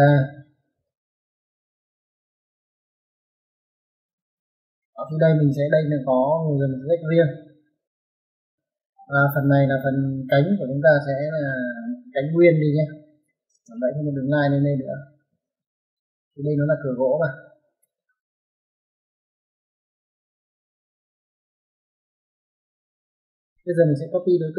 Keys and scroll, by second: 0.0-0.6 typing, 4.1 space, 13.1-13.4 typing, 15.2 space, 16.8 space, 17.7 space, 19.9 typing, 21.9 typing, 22.5 Escape.